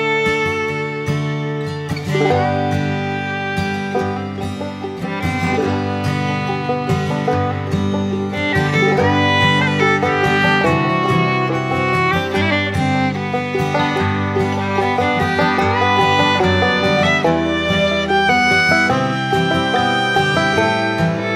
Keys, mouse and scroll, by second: 10.3-19.8 drag.